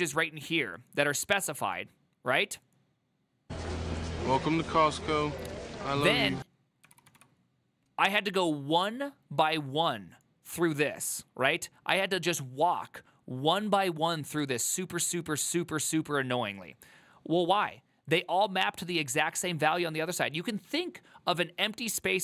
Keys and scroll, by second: 7.2 ctrl+v.